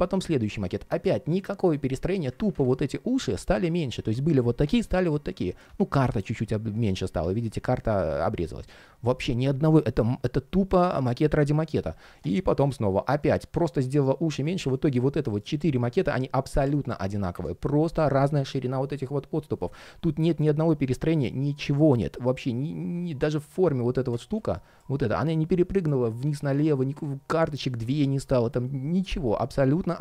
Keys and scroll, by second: 2.1 super+z, 14.3 super+z, 26.0 super+z.